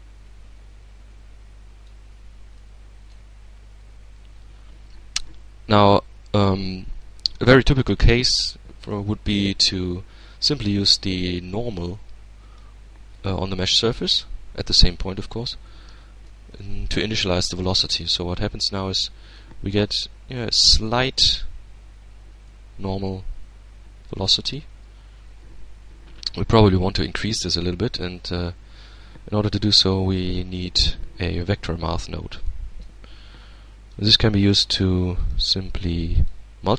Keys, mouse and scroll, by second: 1.8-2.7 middle drag, 3.4 alt+a, 5.9-7.2 drag, 7.3-8.5 middle drag, 10.8-12.2 drag, 12.4-13.5 drag, 14.9-16.6 middle drag, 16.7 alt+a, 17.5-18.1 alt+scroll up 2, 18.1-18.9 shift+middle drag, 18.9-19.3 shift+scroll up 2, 19.3-20.5 shift+middle drag, 21.7-23.6 middle drag, 23.6-24.2 scroll down 1, 26.1 shift+a, 30.9 click, 31.5 middle click, 32.4-34.0 drag, 33.2-34.0 middle drag, 34.2 click, 35.2 click, 35.8-36.7 drag.